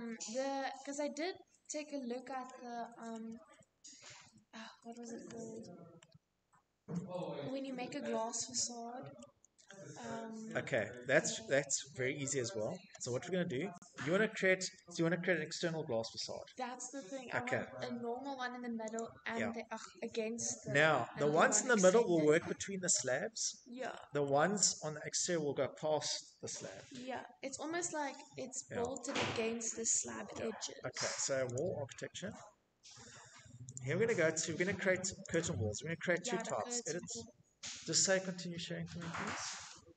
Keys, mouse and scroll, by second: 1.4 middle click, 1.6 middle click, 1.7-2.4 scroll, 3.3 scroll, 3.5 middle click, 3.5 middle click, 3.7 middle click, 3.8 middle click, 3.8 middle click, 7.5 middle click, 7.8 middle click, 8.0 middle click, 8.3 scroll, 9.0-10.0 scroll, 10.2 middle click, 17.2 click, 18.7 middle click, 18.8 middle click, 19.0 middle click, 19.7-20.0 scroll, 21.2-21.7 scroll, 22.5 scroll, 25.0 middle click, 27.2 click, 29.8 click, 32.0 click, 32.6-33.5 scroll, 33.5 click, 34.7 click.